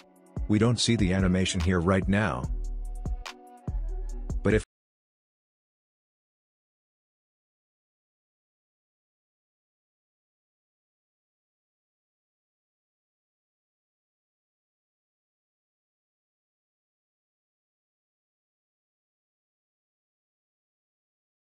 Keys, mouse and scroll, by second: 9.6 Return, 10.9-12.3 drag, 12.3 space, 14.1-16.3 drag, 16.3 n, 17.0 click, 17.5 space, 19.1-21.5 drag.